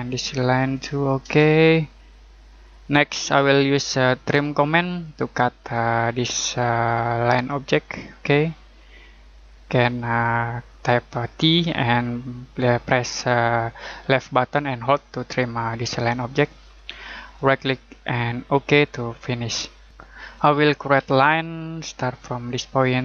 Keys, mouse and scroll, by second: 0.1 click, 1.2 Return, 2.8-3.1 scroll down 1, 3.1-4.3 scroll up 1, 4.3 t, 5.7 click, 14.7-15.1 scroll down 1, 15.1-17.3 scroll up 1, 17.3 right click, 18.5 click, 19.9 Escape, 21.0 l, 22.4 click.